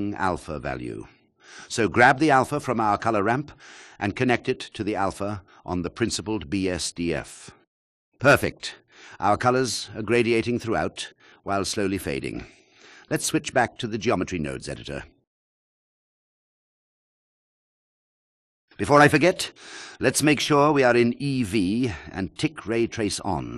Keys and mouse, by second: 4.7 alt+click, 9.0 click, 11.6-13.1 drag, 16.5 drag, 23.1 click.